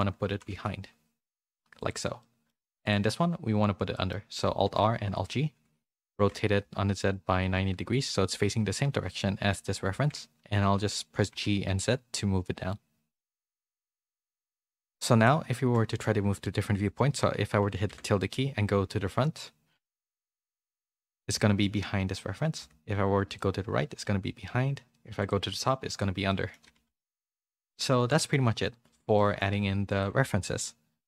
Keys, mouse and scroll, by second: 2.2 middle click, 3.9 middle click, 4.6 alt+r, 5.1 alt+g, 6.1 r, 14.5 middle click, 15.5 shift+middle click, 15.8 middle click, 24.5 `, 26.2 middle click, 26.8 a, 27.0 a, 27.3 middle click, 28.0 shift+middle click, 28.6 middle click, 29.1 shift+middle click, 29.9 click.